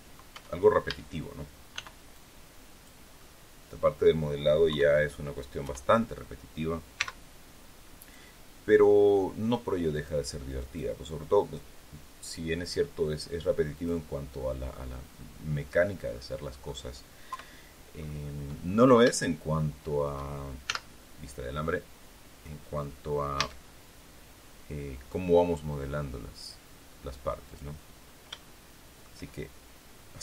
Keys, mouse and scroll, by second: 0.2 Tab, 0.8 a, 1.7 b, 2.0 click, 3.1 click, 4.6 KP_3, 5.6 KP_1, 6.9 x, 7.9 click, 9.9 click, 10.5 click, 13.7 click, 15.1-16.8 middle drag, 17.2 KP_3, 17.9 scroll up 2, 18.6 scroll down 2, 19.1-20.2 shift+middle drag, 20.6 z, 23.3 a, 25.0-27.7 drag, 27.9 scroll up 1, 28.3 shift+middle click.